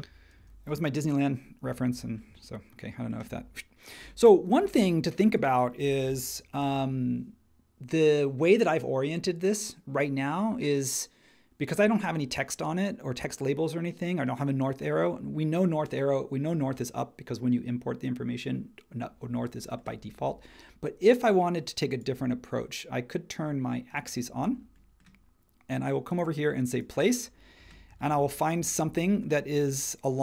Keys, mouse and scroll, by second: 0.4 space, 1.6 h, 4.0 space, 6.0 super+1.